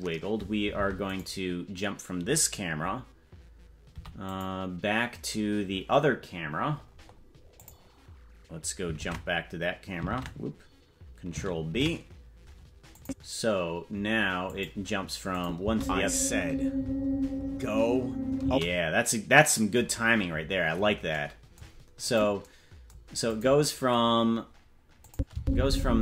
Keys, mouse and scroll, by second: 0.8 ctrl+Tab, 1.2-3.9 right drag, 3.9 i, 6.7-7.4 scroll up 7, 7.6 click, 7.6 scroll up 2, 9.0 ctrl+Tab, 10.1 ctrl+Tab, 11.8 ctrl+b, 13.0 click, 14.5 click, 15.3 click, 15.6 space, 18.4 space, 22.1 click, 23.3 click, 24.2-25.1 scroll down 8, 25.1 click, 25.3 space.